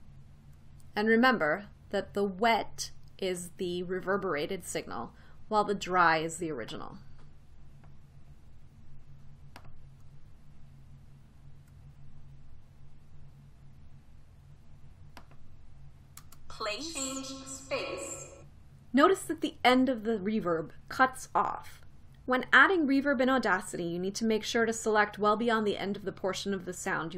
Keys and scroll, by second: 16.9 space.